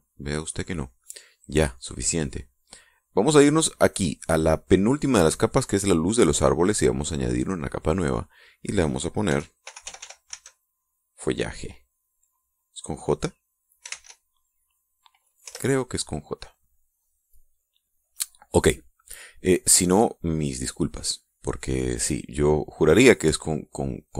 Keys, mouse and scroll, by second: 2.5-3.5 drag, 4.2 click, 7.4 click, 8.4 click, 9.4-11.2 typing, 14.0-14.8 typing, 15.8 Return, 17.7 click.